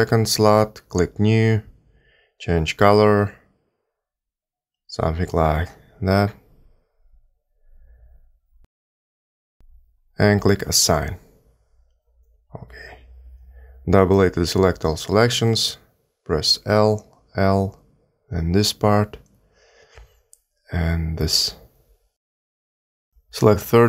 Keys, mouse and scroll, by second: 1.0 click, 2.0 click, 4.7 click, 12.0 click, 14.3 a, 14.4 a, 16.4 l, 17.8 l, 19.1 l, 20.6 l, 22.1 l.